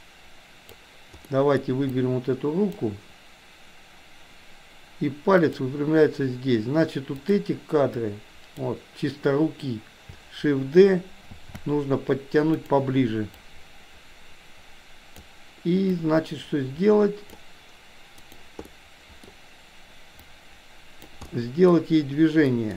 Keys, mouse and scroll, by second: 1.3 middle click, 1.9-2.8 drag, 5.4 click, 7.2 click, 7.9-8.7 drag, 11.3 shift+d, 13.4-15.3 drag, 15.9-17.4 drag, 18.2 click, 18.6 middle click, 20.2-21.2 drag, 21.3 middle click, 22.4 middle click.